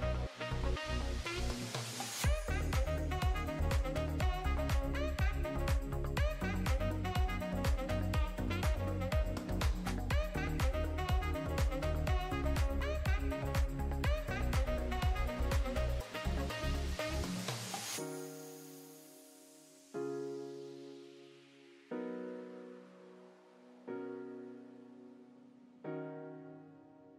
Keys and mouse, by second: 0.2 shift+click, 0.6 ctrl+l, 1.3 click, 1.9 Tab, 4.1 click, 4.9 Tab, 5.7 Tab, 6.6 l, 7.4 click, 7.9 click, 9.1 click, 9.3 Tab, 9.4 middle click, 9.9 click, 10.1 Tab, 10.2 middle click, 10.5 click, 11.2 l, 12.3 click, 13.3 click, 14.1 ctrl+s, 14.1 middle click, 14.3 drag, 14.6-15.3 middle drag, 16.6 click, 17.3 click, 18.4 click, 18.6 middle drag, 19.6 middle drag, 19.9 KP_0, 20.8 middle click, 21.1 shift+middle drag, 21.9 shift+drag, 22.2 shift+click, 22.6 ctrl+l, 23.9 click, 25.5 shift+middle click, 25.6-27.0 drag, 27.0 KP_Divide.